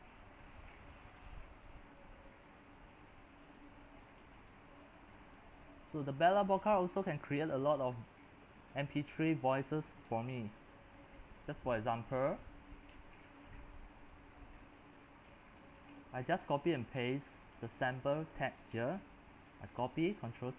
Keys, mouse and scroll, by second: 4.7-19.8 drag, 19.8 ctrl+c.